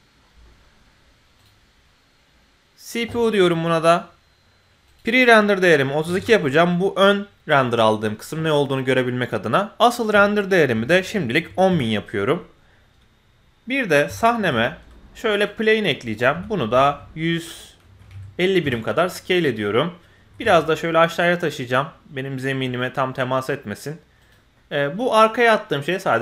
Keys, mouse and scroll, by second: 1.3-2.9 drag, 4.9-6.2 drag, 9.8-11.7 drag, 11.1 KP_0, 14.3 shift+a, 16.3 s, 19.5 middle click, 20.2 g, 24.5 middle click.